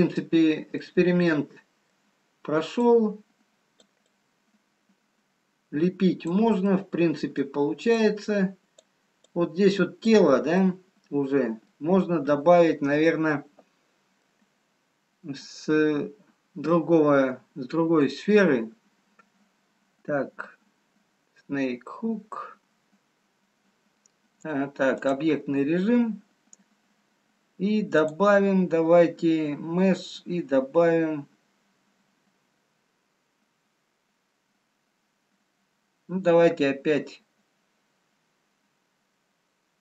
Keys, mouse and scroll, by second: 0.2 middle click, 1.2 middle click, 3.0 click, 5.2 click, 6.5 middle click, 7.8 click, 9.2 click, 10.6 middle click, 14.3 middle click, 23.6 click, 28.6 click.